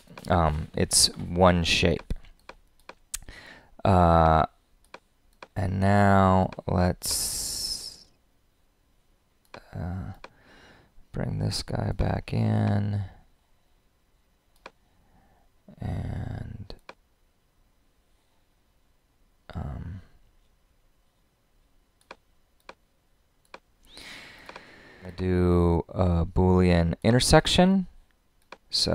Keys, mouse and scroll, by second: 28.4-28.9 drag.